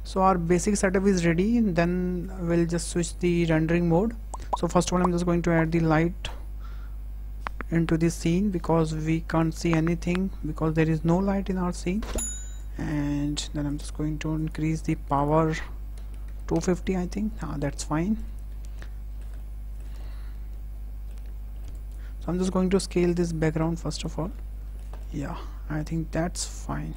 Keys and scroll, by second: 5.8 shift+a, 11.0 s, 15.8 KP_2, 16.1 KP_5, 16.2 KP_0, 16.4 Return.